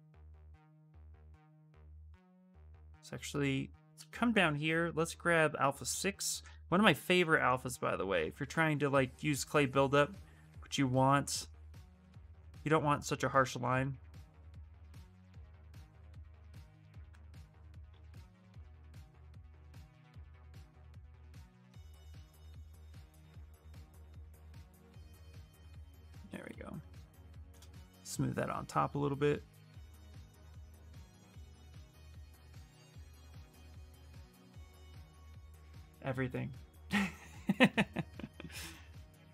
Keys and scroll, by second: 0.5 s, 2.3 space, 6.3 ctrl+z, 6.6 ctrl+z, 6.8 ctrl+z, 13.4 ctrl+z, 17.2 shift+f.